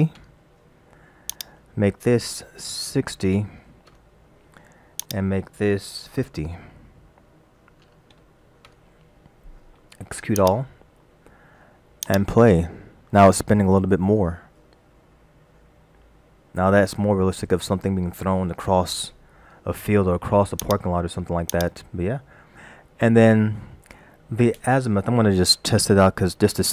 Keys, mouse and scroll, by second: 1.3 click, 5.0 click, 10.4 click, 12.1 click, 20.6 click, 21.5 click.